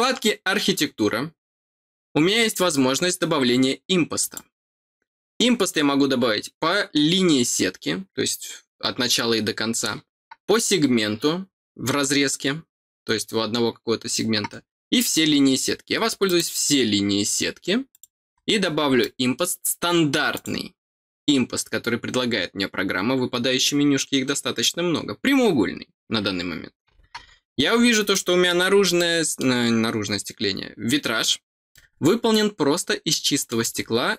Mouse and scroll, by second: 4.1 click, 16.2 click, 17.9 click, 18.3-18.6 scroll down 2, 19.0-20.3 middle drag, 20.3 click, 27.5 scroll down 2, 28.1 middle click, 28.9 middle click, 31.7-33.4 middle drag, 34.0 scroll down 1.